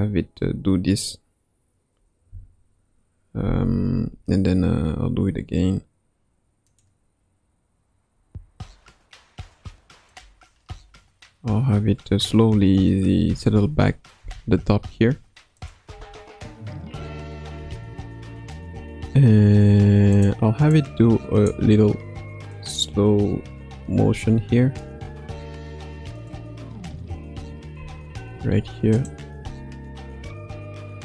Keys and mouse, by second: 6.6 click, 8.1 r, 13.2 a, 14.2 i, 15.5 click, 15.9 space, 17.5 space, 20.1 click, 20.7-21.5 drag, 22.4 click, 26.2 r, 26.8 a, 27.7 i, 29.0-29.4 drag, 29.4 space.